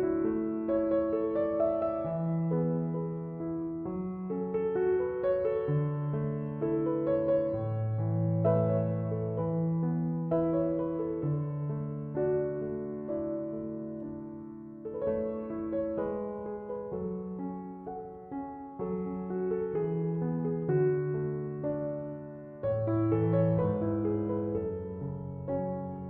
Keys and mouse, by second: 6.2-22.1 drag.